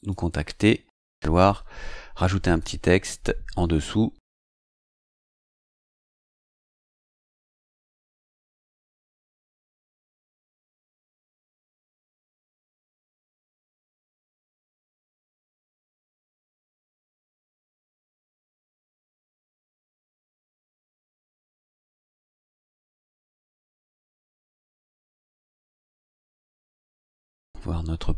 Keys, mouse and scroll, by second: 1.1 click, 2.4 click, 7.5 click, 8.9 click, 13.1-23.2 typing, 24.4-26.5 typing.